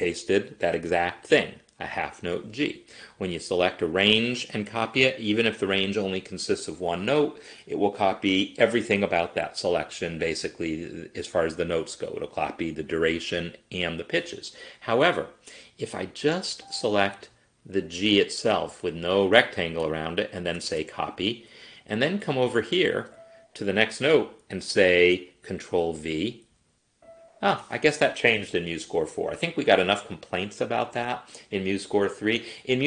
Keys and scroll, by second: 20.6 ctrl+c, 26.3 ctrl+v.